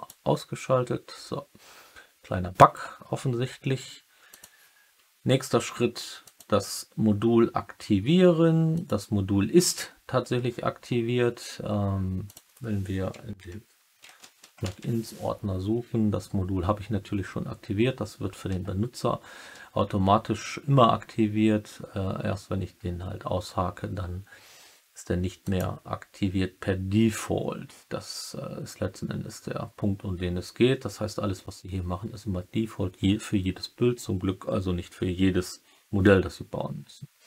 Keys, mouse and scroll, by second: 6.2-8.9 drag.